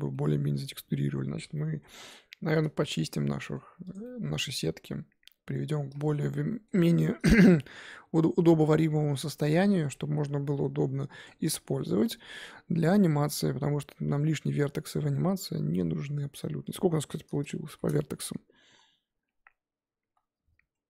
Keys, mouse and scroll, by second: 0.0 scroll down 2, 0.1-1.4 middle drag, 1.4 scroll down 1, 1.5 middle click, 2.1 click, 2.8 Tab, 3.2 middle click, 3.6 Tab, 3.9 click, 4.0-5.6 middle drag, 5.6 scroll down 1, 5.7 scroll up 2, 6.0 shift+middle click, 6.5 middle click, 6.7-7.3 scroll up 4, 7.3-8.6 shift+middle drag, 8.6 Tab, 9.1 Tab, 9.3 click, 9.3 Tab, 9.5 scroll down 3, 9.6 middle click, 10.0 z, 10.5 scroll down 5, 10.8 Tab, 11.2 click, 11.5-16.0 shift+middle drag, 16.7 click, 17.7 shift+h, 18.0 Tab, 18.6 a.